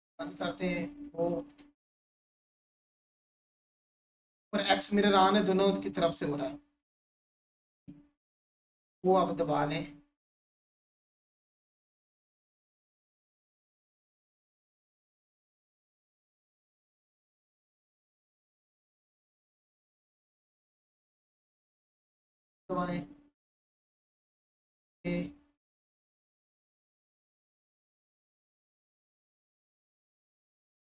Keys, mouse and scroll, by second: 0.3 click, 4.1 click, 6.8 click, 10.8 right click, 15.7 click, 19.8 click, 20.3 3, 21.4-24.6 alt+shift+drag, 25.9 3, 28.4 click, 29.0 1, 30.2 click.